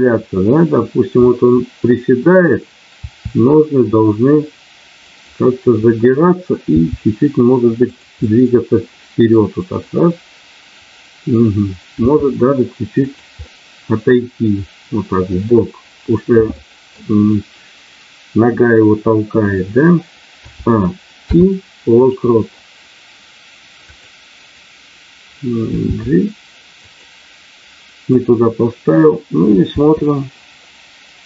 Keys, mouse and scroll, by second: 1.2-2.3 middle drag, 2.9 r, 5.1 click, 6.7 g, 7.8 click, 9.8-11.4 middle drag, 11.9 r, 13.0 click, 14.7 middle click, 16.5 middle click, 21.0 i, 23.8 click, 25.8 g, 26.8 click, 28.0 click, 29.7 space.